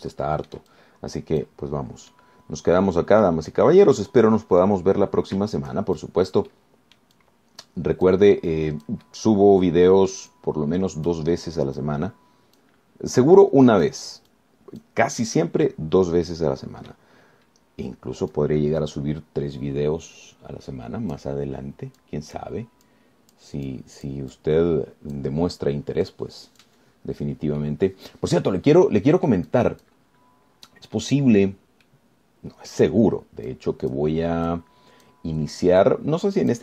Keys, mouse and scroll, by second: 0.9-1.9 shift+middle drag, 1.9 shift+click, 3.3-4.7 middle drag, 4.7-6.1 drag, 6.1 scroll down 2, 7.2-9.5 shift+drag, 9.6-12.5 drag, 13.0-14.0 drag, 14.1 scroll down 1, 14.6 click, 15.5 click, 16.5-18.3 drag, 18.5-18.9 scroll up 1, 19.1-19.5 scroll up 1, 19.5-22.5 drag, 22.7 scroll down 1, 23.2 click, 24.1 click, 24.9 click, 26.7-27.3 scroll down 1, 27.3 click, 28.2-28.5 scroll down 1, 28.8-31.3 drag, 32.1-33.1 scroll down 1, 33.1-34.1 drag, 34.7 click, 35.7 click.